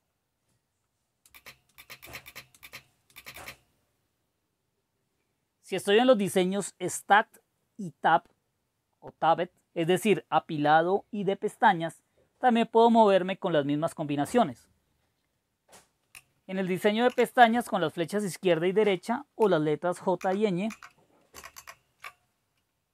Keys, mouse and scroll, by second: 1.3-3.3 typing, 17.0 super+w, 20.2 super+Left, 20.7 super+Left, 21.3 super+Right, 21.6 super+Right.